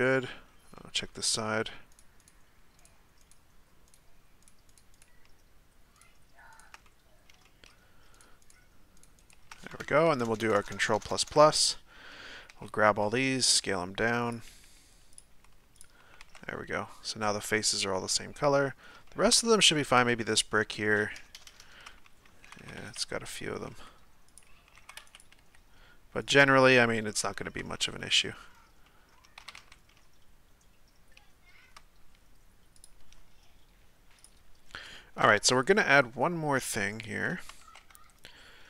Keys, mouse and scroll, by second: 1.3 shift+right click, 1.9 shift+right click, 2.2 shift+right click, 2.8-3.3 shift+right drag, 3.9 shift+right click, 4.4-4.8 shift+right drag, 4.9 shift+right click, 5.9 shift+right click, 6.5 shift+right click, 6.8-8.1 middle drag, 8.1 shift+right click, 8.4 shift+right click, 9.0-9.3 shift+right drag, 10.2-10.9 ctrl+KP_Add, 11.1 ctrl+KP_Add, 11.2 ctrl+KP_Add, 12.5 a, 13.0 s, 14.5 g, 15.4 s, 16.2 Tab, 16.7-18.7 middle drag, 18.7-19.1 scroll up 2, 19.1 shift+middle click, 19.5 right click, 20.0 Tab, 20.3 right click, 21.4 ctrl+KP_Add, 21.5 ctrl+KP_Add, 22.4-25.4 typing, 27.1-27.6 middle drag, 27.6 Tab, 28.0 middle click, 28.1-28.9 scroll down 5, 28.9-29.4 middle drag, 29.4 a, 29.6 a, 29.9-32.8 middle drag, 32.8 click, 34.3 Tab, 35.0 middle click, 35.7-36.2 scroll up 1, 36.2 scroll up 2, 36.2-36.9 shift+middle drag, 36.9 right click, 37.6 Tab.